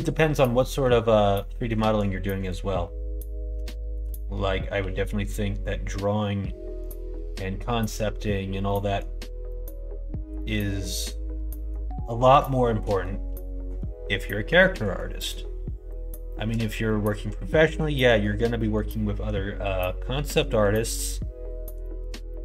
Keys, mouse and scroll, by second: 0.5 middle click, 1.4 middle click, 3.6 shift+middle click, 4.7 g, 8.6 middle click, 9.4 scroll up 1, 9.4 middle click, 9.6 scroll down 1, 10.3-11.7 middle drag, 10.3 scroll up 1, 10.5-11.5 scroll down 2, 12.8 middle click, 14.7 middle click, 15.2 middle click, 16.2 middle click, 16.8 middle click, 17.4 shift+middle click, 17.4 scroll up 1, 17.6 scroll down 1, 18.0 middle click, 18.0 scroll up 1, 18.2 scroll down 1, 18.5 middle click, 21.7 middle click, 22.2 shift+middle click.